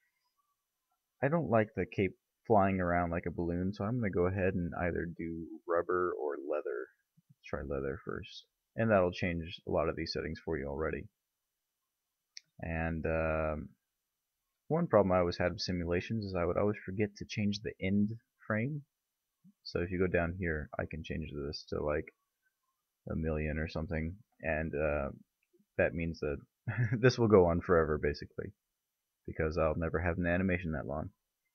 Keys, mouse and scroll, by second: 11.7-17.0 middle drag, 18.2 click, 22.4 0, 22.6 0, 22.9 0, 23.1 0.